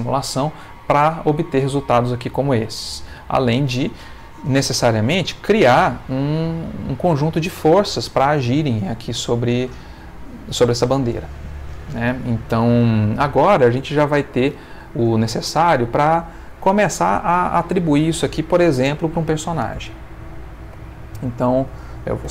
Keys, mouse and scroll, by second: 3.4 click, 20.7 Escape, 22.2 ctrl+s.